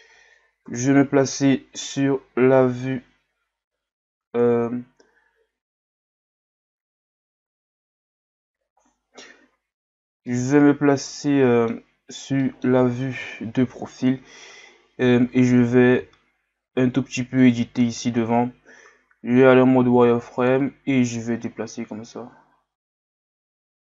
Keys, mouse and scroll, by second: 0.6 KP_3, 3.7 KP_1, 5.5 KP_3, 9.9-10.3 scroll down 2, 10.3-12.0 middle drag, 12.0-12.4 scroll up 2, 12.4 middle click, 13.2 KP_3, 14.1-14.8 scroll up 2, 16.0 z, 17.4 right click, 21.0-23.9 drag.